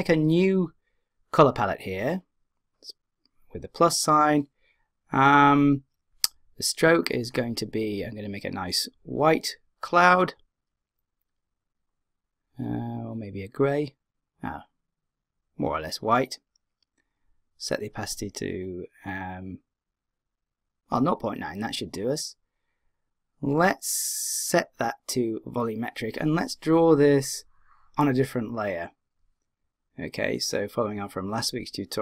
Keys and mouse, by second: 2.5 click, 7.3-9.0 drag, 10.4-12.0 drag, 25.4 click, 27.3 click.